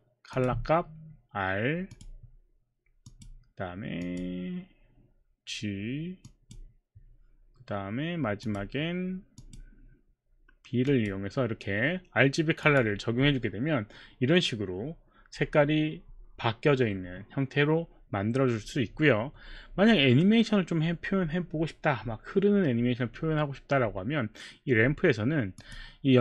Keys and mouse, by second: 0.3 click, 1.9 click, 3.0 click, 4.0 click, 6.2 click, 8.4 click, 9.4 click, 10.9 click, 12.6 click, 25.6 click.